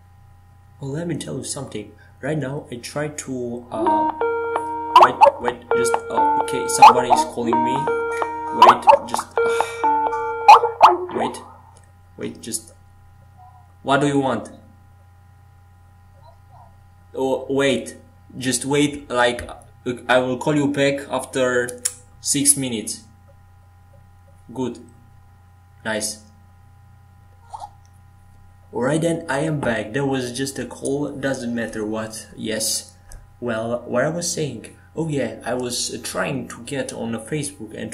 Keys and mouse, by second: 0.3-2.8 drag, 2.8-9.3 right drag, 7.7-12.4 drag, 9.4-17.4 right drag, 17.4 middle click, 18.8 middle click.